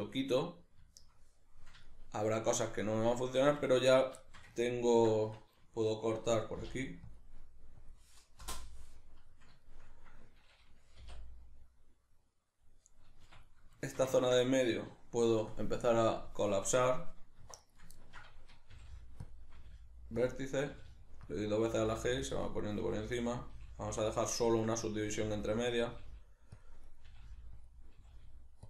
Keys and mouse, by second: 0.4-16.1 middle drag, 6.6 k, 11.0 k, 16.1 click, 16.7 right click, 17.4 1, 17.6 right click, 17.9-19.3 ctrl+middle drag, 18.7 g, 19.3 click, 19.5 g, 20.3 click, 20.5 right click, 20.8 g, 21.4 click, 21.7 g, 22.4 click, 22.6 right click, 22.8 g, 23.4 click, 23.6 g, 24.2 click, 24.4 shift+middle click, 24.8 right click, 25.0 g, 25.7 click, 25.9 g, 26.6 click, 26.9 right click, 27.1 g, 27.7 click, 28.0 g.